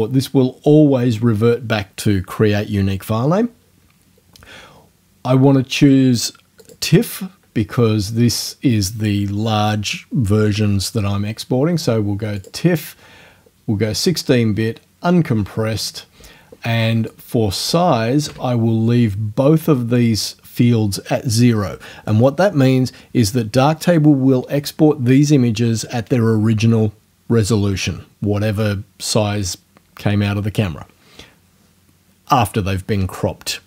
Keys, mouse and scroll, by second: 0.8 middle click, 6.6 click, 12.4 click, 12.6-16.9 middle drag, 17.1 click, 18.3 KP_0.